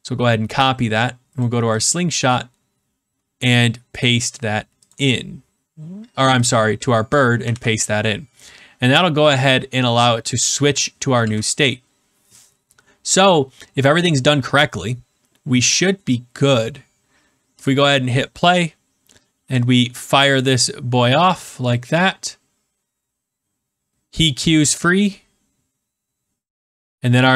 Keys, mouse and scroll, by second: 1.3 click, 1.7 click, 2.2 scroll, 2.7-3.2 scroll, 4.7 scroll, 4.8 click, 6.4 click, 7.1 click, 7.5 ctrl+v, 11.1 ctrl+s, 15.8 middle click, 17.6 click, 20.4 click.